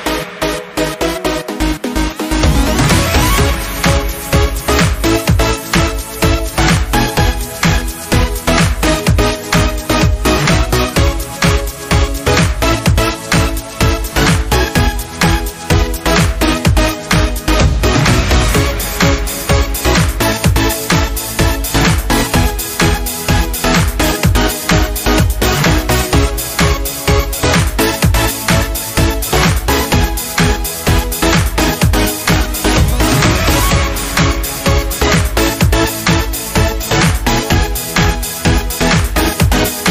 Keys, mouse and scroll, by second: 1.2 space, 1.3 click, 1.6 space, 2.3-6.8 drag, 6.8 alt+scroll down 1, 8.3-13.7 drag, 13.7 alt+scroll down 1, 15.0 click, 16.3 alt+scroll up 1, 17.9 space, 18.1 click, 18.4 space, 22.7 scroll down 1, 24.7 click, 36.7 shift+click.